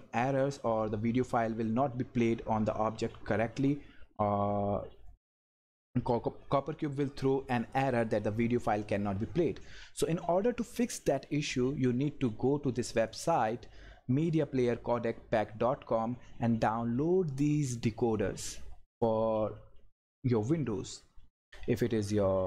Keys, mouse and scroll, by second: 12.9 click, 16.4 scroll up 1, 17.4 scroll up 1, 18.4 scroll down 1, 21.3 scroll down 1.